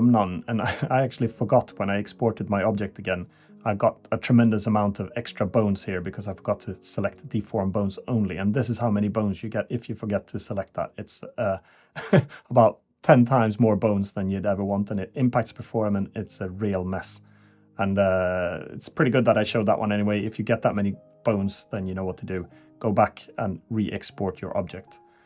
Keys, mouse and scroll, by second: 20.7 click, 21.6 click, 22.8 a, 24.3 click.